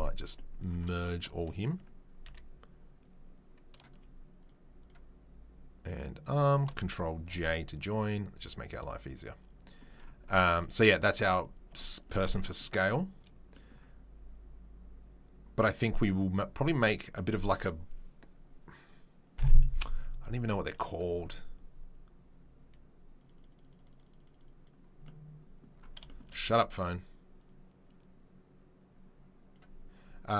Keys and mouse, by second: 2.2 c, 6.2 shift+click, 7.5 ctrl+j, 13.1 click, 16.6 right click, 16.7-20.8 middle drag, 20.8 right click, 20.9-23.3 middle drag, 23.3-30.3 right drag.